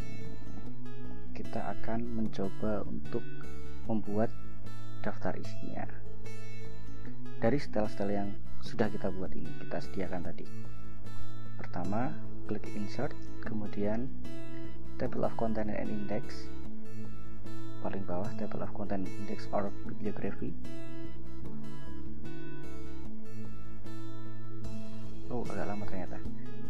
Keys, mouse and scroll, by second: 3.5 click, 5.3-6.3 scroll down 6, 10.3 click, 12.5 click, 20.5 click.